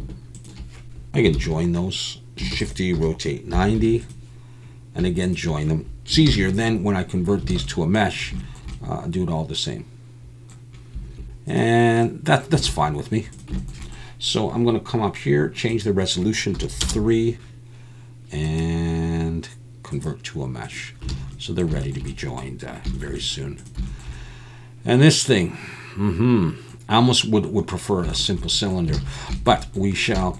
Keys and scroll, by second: 1.4 ctrl+j, 2.5 shift+d, 2.9 r, 3.5 9, 3.7 0, 6.3 ctrl+j, 7.5 alt+a, 12.7 alt+a, 21.2 alt+a, 29.0 alt+a.